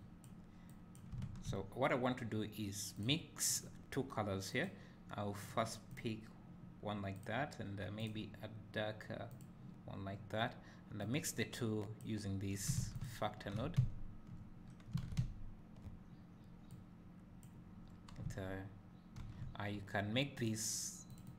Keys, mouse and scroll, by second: 11.1-13.1 drag, 13.7 `, 14.7 scroll up 1, 16.7-18.8 drag.